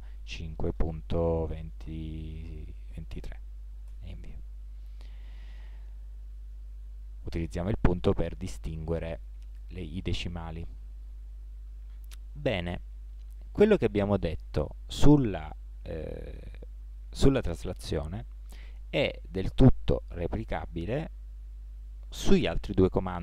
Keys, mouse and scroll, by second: 5.0-5.5 drag, 5.5-10.9 middle drag, 11.8-13.5 middle drag.